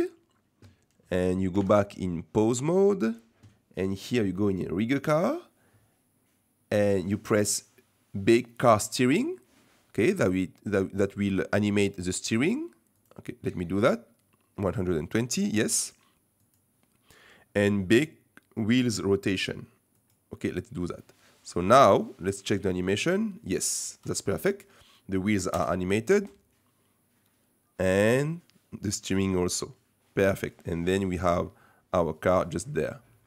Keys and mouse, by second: 1.7 ctrl+Tab, 4.8 click, 10.5 middle click, 13.0-16.6 drag, 18.8-20.1 drag, 21.9 middle click, 22.7 space, 23.9 space, 24.9 middle click, 25.5 KP_0, 26.1 space.